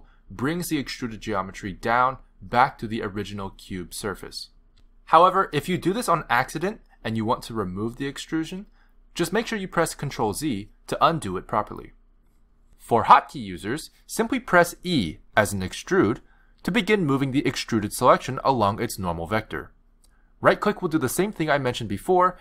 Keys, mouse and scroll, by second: 1.2 click, 2.4 s, 5.3 click, 9.9 click, 11.5 ctrl+z, 16.5 click, 17.4 click, 18.6 e.